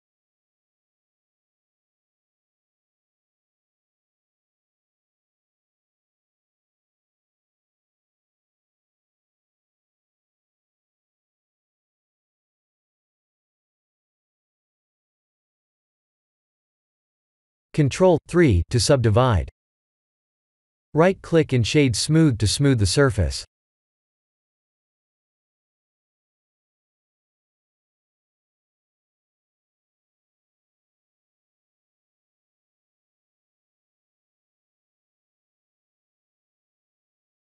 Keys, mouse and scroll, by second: 0.9 f, 1.5 middle click, 3.1 middle click, 3.2 ctrl+z, 6.1 click, 7.2 shift+click, 8.2 shift+click, 8.9 f, 9.6 middle click, 9.7 middle click, 10.1 middle click, 10.1 Tab, 10.1 middle click, 10.5-11.2 scroll down 4, 11.2 middle click, 12.1 middle click, 12.4 middle click, 13.2 middle click, 13.6-14.0 scroll up 1, 14.2 middle click, 16.3 middle click, 17.3-17.9 scroll down 1, 17.9 KP_1, 18.3 Tab, 19.0 Tab, 19.3 ctrl+3, 20.5-20.9 scroll up 4, 21.1 middle click, 22.1 Tab, 22.8 middle click, 27.0 middle click, 27.1 x, 28.2 middle click, 30.5 3, 30.8 click, 31.7 x, 33.0 middle click, 34.5 middle click, 34.8 middle click, 34.9 middle click, 35.7 2, 36.2 alt+click, 37.1 alt+click.